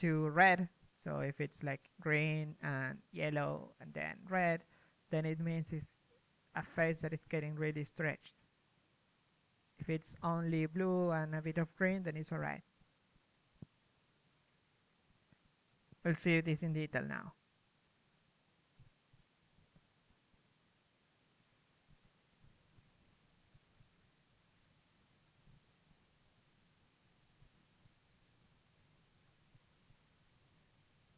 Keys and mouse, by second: 0.5-3.9 typing, 4.1-5.4 right drag, 5.0 p, 5.2 g, 5.4 middle click, 5.7 s, 6.4 middle click, 7.1 click, 7.1 a, 7.1 a, 7.3 a, 7.9-9.2 right drag, 8.6-10.9 typing, 9.5 click, 10.9 Tab, 11.1 Tab, 13.6-17.2 typing, 14.4 click, 16.4 click, 16.7 middle click, 17.2 right click, 19.7 p, 20.0 g, 20.9 s, 21.9 g, 22.9 middle click, 24.3 g, 25.1 click, 25.9 right click, 26.6 click, 26.6-29.7 typing, 28.2 click, 30.4 click.